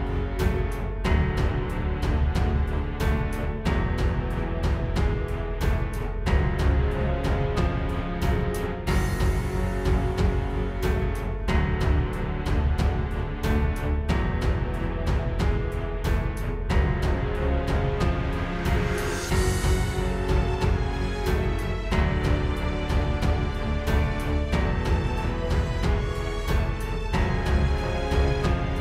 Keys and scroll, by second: 4.5 space, 4.9 space, 5.4 space, 5.8 space, 9.3 space, 9.6 space, 10.8 space, 16.2 super+space, 18.5 space, 22.3 super+z, 23.5 super+z, 25.9 super+z.